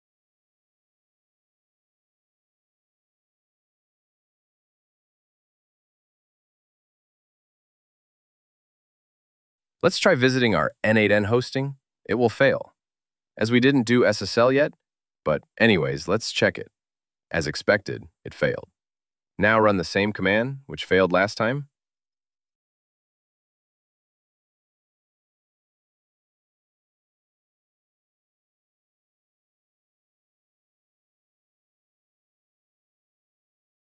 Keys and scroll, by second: 2.3 super+v, 2.8 super+v, 8.2 super+t.